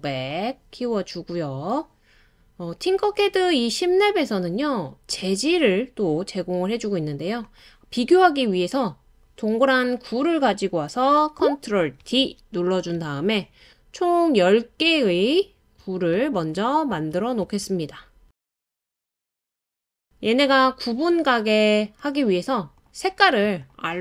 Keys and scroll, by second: 1.3 typing, 12.0 super+d, 13.0 Right, 13.5 Right, 13.5 Right, 13.6 Right, 13.7 Right, 13.8 Right, 15.0 super+d, 15.3 super+d, 15.6 super+d.